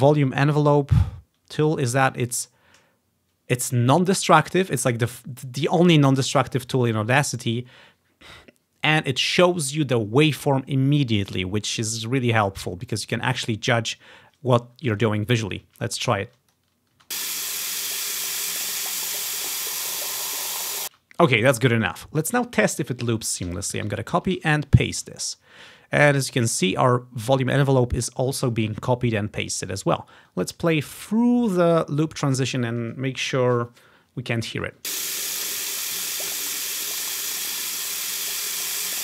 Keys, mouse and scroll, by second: 13.0 click, 15.5 click, 16.4 click, 16.4 space, 17.1 space, 21.0 space, 21.9 click, 22.1 click, 23.6 ctrl+c, 23.9 Right, 24.3 ctrl+v, 24.4 ctrl+c, 24.4 Right, 24.5 ctrl+v, 25.2-27.4 ctrl+scroll down 1, 29.8-31.6 drag, 32.2-33.1 scroll up 2, 35.1 space.